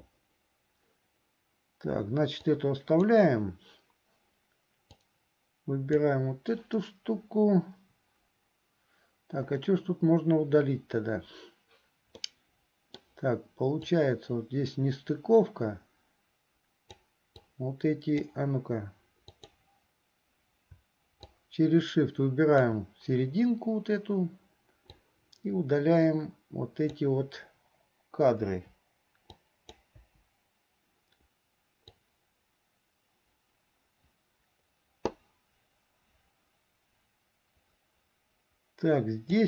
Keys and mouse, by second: 2.5 click, 4.9-6.2 drag, 12.3 middle click, 14.1-17.1 drag, 17.6 click, 19.4 click, 21.4-22.9 shift+drag, 25.0-26.9 drag, 29.6 right click, 30.2 Delete, 32.1-39.4 drag.